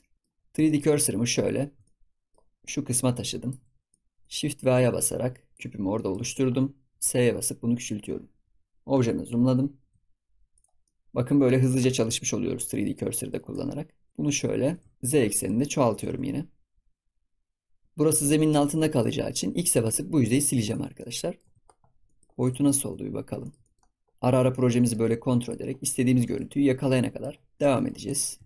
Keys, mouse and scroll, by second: 0.1 middle drag, 0.3-0.6 scroll up 4, 0.6-2.6 shift+middle drag, 2.6-3.6 shift+right drag, 3.6 scroll down 1, 3.9-4.7 middle drag, 4.7 shift+a, 5.7 scroll down 2, 5.9 middle drag, 6.2-6.8 scroll down 9, 6.8 s, 8.8 KP_Decimal, 9.7 s, 10.8 middle drag, 11.0 scroll down 2, 11.4 scroll up 1, 11.4 middle drag, 11.6 scroll down 1, 11.8 scroll up 1, 12.1-13.5 middle drag, 13.5 Tab, 14.1 click, 14.7 g, 15.2 scroll down 1, 15.4 middle click, 15.9 g, 17.8-19.7 middle drag, 19.7 x, 20.9 middle click, 21.4 Tab, 21.5 scroll up 1, 21.6 scroll down 1, 22.0 middle click, 22.4 click, 22.6-22.9 scroll down 3, 22.9-23.4 scroll up 5, 23.4 shift+middle click, 24.0 scroll up 2, 24.1 scroll down 6, 24.3-25.4 middle drag, 25.4 click, 25.6 scroll up 4, 25.9 scroll down 2, 26.2-27.3 shift+middle drag, 27.3 scroll up 2, 27.6-28.0 shift+middle drag, 28.0 click.